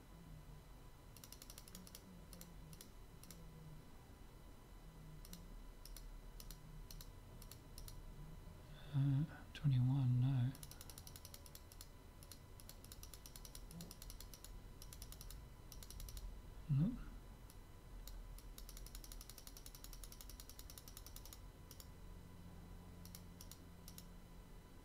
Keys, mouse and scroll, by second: 1.2-4.9 drag, 5.3-9.6 drag, 10.6-24.8 drag.